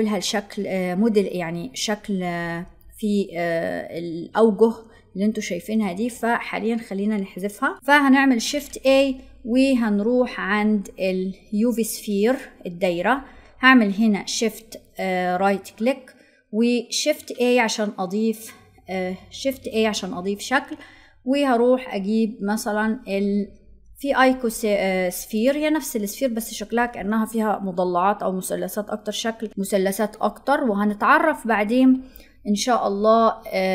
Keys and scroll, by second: 19.2 shift+a.